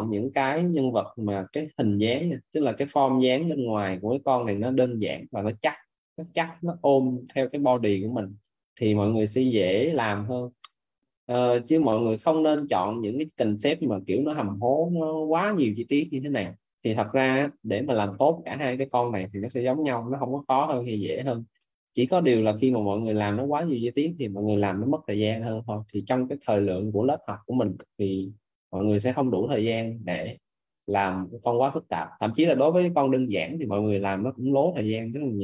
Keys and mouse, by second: 2.7 middle click, 12.6 middle click, 29.4 middle click.